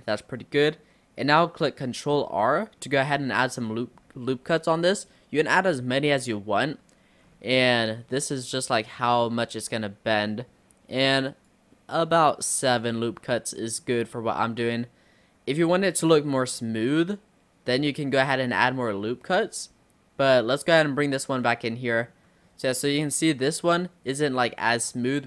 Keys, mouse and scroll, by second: 0.0 middle click, 0.9-2.3 scroll up 1, 2.3 ctrl+r, 13.3-18.1 middle drag, 18.1-19.1 scroll down 5, 20.7 click, 21.3-22.5 middle drag, 22.5-22.9 scroll up 1, 22.9-24.3 middle drag, 24.3 scroll down 1, 24.6 middle click, 25.1-25.2 scroll down 1.